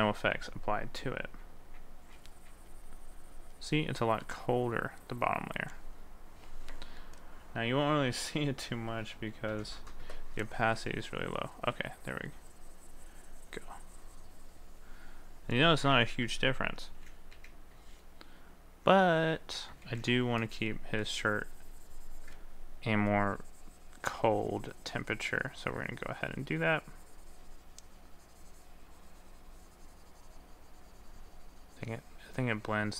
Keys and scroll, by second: 16.9 ctrl+z, 20.0 ctrl+z.